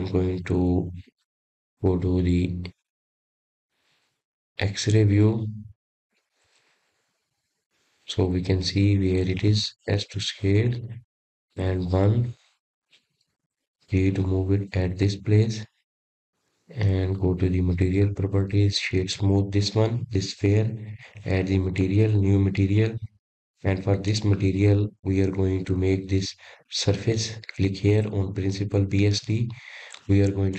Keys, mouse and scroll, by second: 0.7-1.2 scroll down 4, 1.9 s, 8.2 click, 9.1-10.9 drag, 11.7-12.3 scroll up 4, 12.3-14.6 middle drag, 14.6 s, 16.2 KP_1, 18.2 g, 19.7-20.1 scroll down 1, 20.1-22.1 middle drag, 22.1 click, 23.7-25.5 right drag, 25.5 click, 26.3-27.4 drag, 27.4-28.0 scroll down 5, 28.0-28.7 scroll up 2, 28.7-30.4 drag.